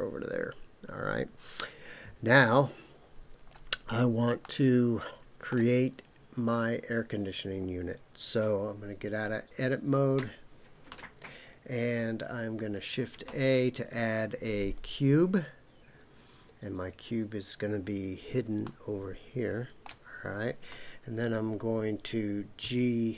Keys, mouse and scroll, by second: 4.4-5.5 middle drag, 10.1 Tab, 13.1 shift+a, 18.6-19.9 shift+middle drag, 22.7 g.